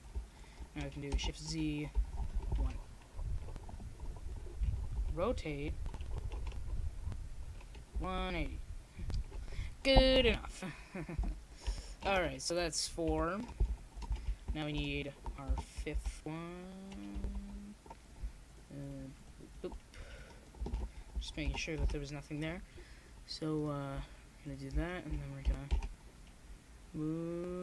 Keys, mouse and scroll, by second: 0.9 ctrl+z, 1.4 ctrl+z, 2.6-6.8 drag, 6.8 shift+s, 7.0 click, 8.6 right click, 10.1 shift+d, 10.2 right click, 14.0-15.2 middle drag, 15.2 shift+d, 25.3 middle click, 26.7 KP_0.